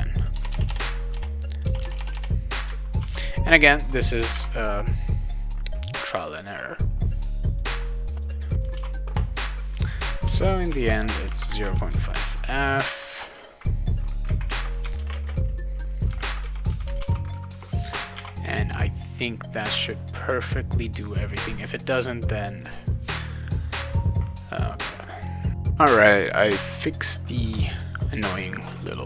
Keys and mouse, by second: 0.2 click, 0.4 BackSpace, 0.7 BackSpace, 1.5 click, 1.8 BackSpace, 2.1 BackSpace, 3.0 ctrl+s, 4.3 alt+Tab, 8.2 click, 8.7 alt+Tab, 9.8 click, 10.2-12.4 typing, 14.5-17.2 typing, 18.1 alt+Tab, 22.6 click.